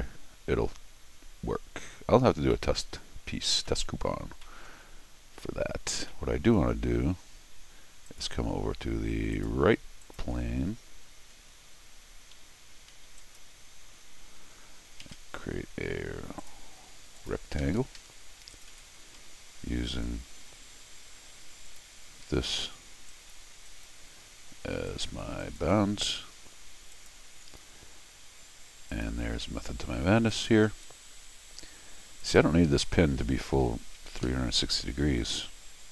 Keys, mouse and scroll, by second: 2.5 middle click, 3.6 middle click, 4.3 scroll down 1, 4.5 middle click, 6.1 middle click, 8.1 click, 9.3 click, 10.0 click, 11.3 n, 13.1 w, 13.2 click, 14.1 scroll up 2, 15.0 ctrl+r, 16.4 click, 17.2 click, 17.6 Escape, 18.0 Escape, 18.5 click, 18.7 g, 19.2 Escape, 19.9 click, 21.7 click, 22.2 Escape, 23.1 click, 23.7 click, 24.9 ctrl+click, 25.4 ctrl+click, 26.9 click, 28.9 click, 30.3 ctrl+click, 32.2 click, 33.2 Escape, 34.1 alt+x.